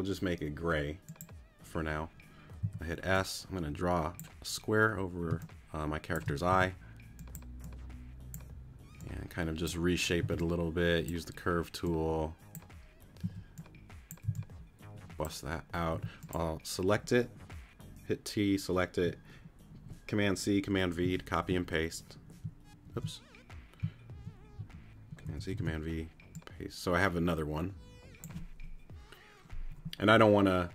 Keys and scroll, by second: 2.6 s, 5.3 space, 6.5 t, 10.2 c, 13.2 a, 15.3 c, 15.9 t, 21.0 super+v, 22.8 super+z, 25.2 super+c, 25.5 super+v.